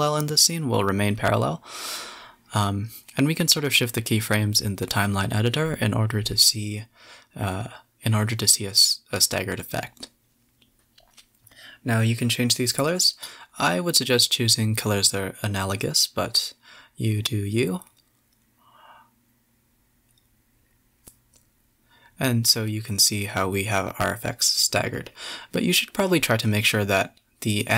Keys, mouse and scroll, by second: 0.2 click, 0.7 g, 1.9 space, 2.0 scroll down 2, 3.6 KP_7, 4.0 KP_0, 4.9 z, 5.4 space, 5.9 middle click, 11.8 scroll down 2, 12.0 space, 12.3-13.0 middle drag, 13.0 KP_7, 13.5 KP_0, 14.9 space, 15.1 middle drag, 15.3 middle click, 15.5 scroll down 3, 15.9 click, 16.8 click, 16.9 g, 18.2 middle click, 18.3 space, 18.4 scroll down 2, 18.8-19.2 middle drag, 19.2 KP_0, 21.9 F12, 23.3-23.9 middle drag, 23.9 scroll down 3, 24.1-24.5 middle drag, 24.5 click, 24.8 click, 25.3 shift+click, 25.9-26.4 middle drag, 26.4 shift+click, 27.0 shift+d.